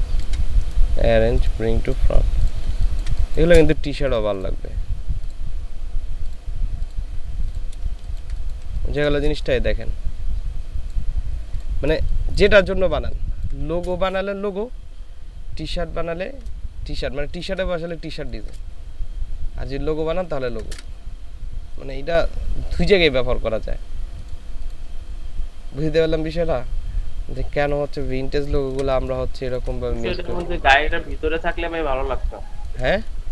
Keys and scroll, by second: 2.7 ctrl+space, 4.4 ctrl+space, 7.9 ctrl+space, 8.6 ctrl+space, 12.0 ctrl+space, 16.9 ctrl+space, 17.7 ctrl+space, 20.1 ctrl+space, 28.4 ctrl+space, 29.2 ctrl+space, 30.0 ctrl+space.